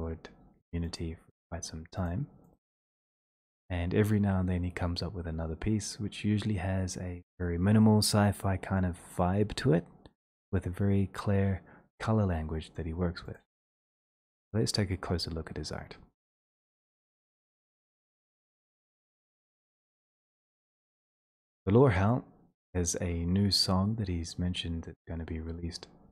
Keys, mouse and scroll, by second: 13.4 click, 18.0 click, 21.2 click, 21.6 ctrl+click, 22.4 ctrl+click.